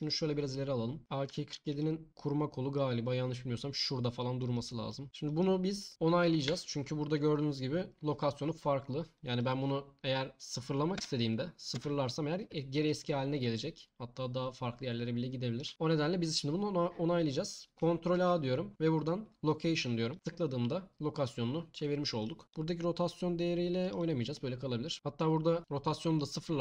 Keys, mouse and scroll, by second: 0.0 click, 3.4 click, 6.5 n, 9.1-11.7 drag, 15.7 ctrl+z, 18.1 ctrl+a, 22.5-23.8 drag, 24.9 ctrl+a.